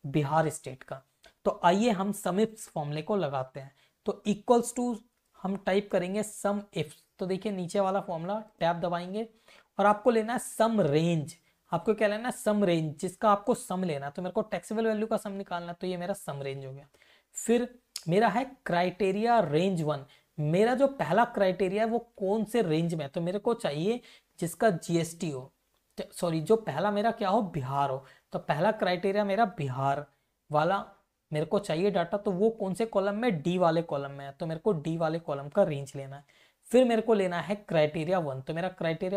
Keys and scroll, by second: 0.7 Right, 2.5 Right, 4.0-6.6 typing, 6.8 Down, 8.2 Tab, 11.6 BackSpace, 15.3 ctrl+shift+Down, 17.0 ,, 20.5 Up, 21.4 Down, 25.9 Left, 34.3 ctrl+shift+Down, 36.4 ,, 37.3 Up, 37.8 Up, 38.3 Down.